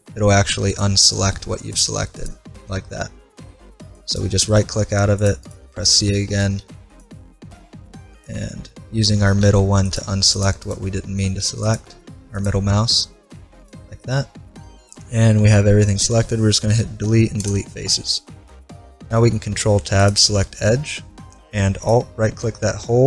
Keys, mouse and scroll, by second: 4.5-5.5 middle drag, 4.9 c, 5.5-7.5 right drag, 6.6 c, 8.5-10.5 middle drag, 9.4 c, 11.0-12.9 middle drag, 11.4 c, 14.0 middle click, 17.0 Delete, 18.1-19.6 middle drag, 19.2 ctrl+Tab, 21.8-23.0 right drag.